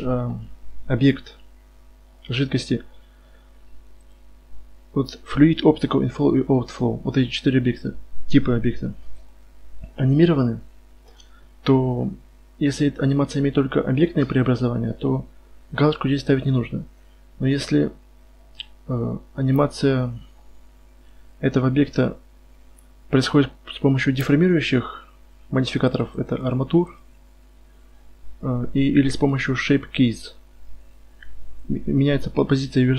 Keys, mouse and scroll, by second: 30.9-32.9 drag.